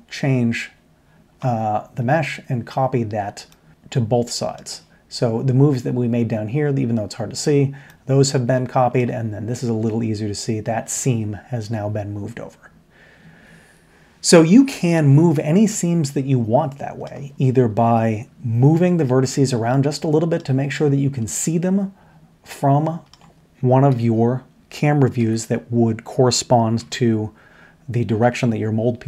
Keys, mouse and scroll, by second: 7.8-8.4 middle drag, 16.6 middle drag, 17.4-18.6 middle drag, 19.3-20.3 middle drag, 21.2 middle click, 22.4 middle click, 23.9 KP_5, 25.2 KP_3, 26.8 KP_1.